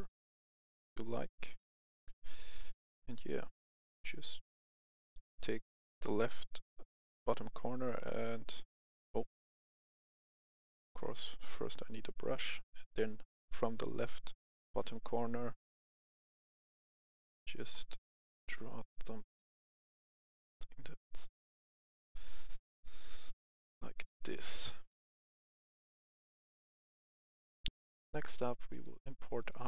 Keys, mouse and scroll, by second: 19.2-27.0 drag, 27.6 Delete, 27.7 F10, 28.6 click, 29.3 click.